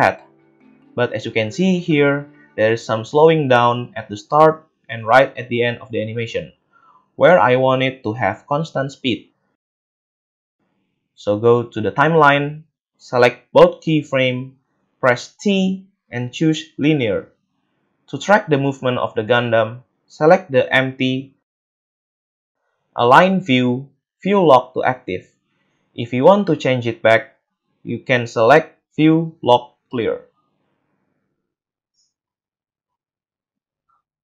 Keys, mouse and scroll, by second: 1.9 space, 11.7 right click, 15.2 t, 19.9 middle click, 19.9 right click, 28.5 space, 33.7-34.2 middle drag, 33.7 a.